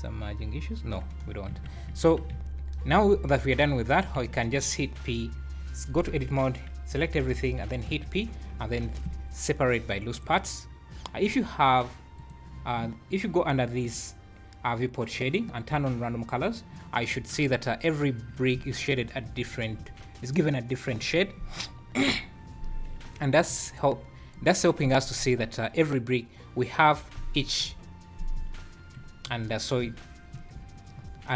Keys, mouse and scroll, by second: 1.0-1.9 scroll down 15, 1.5 Tab, 1.9 `, 2.3 `, 2.4 scroll up 1, 3.1 scroll up 3, 3.5 Tab, 4.2 a, 7.8 p, 12.1 click, 13.8 click, 17.3 Tab, 18.2 scroll down 4, 19.0 scroll up 3, 19.3 `, 19.8 `, 30.9 `.